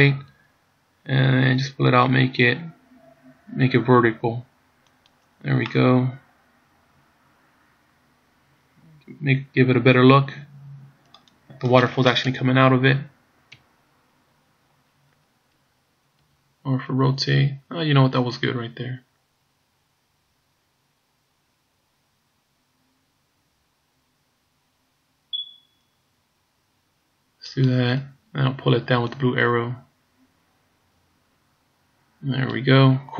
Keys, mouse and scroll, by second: 0.4 r, 5.8 middle click, 11.6-12.3 scroll up 1, 12.3 KP_Enter, 12.3 KP_3, 13.6 KP_Decimal, 16.4 r, 29.2 click.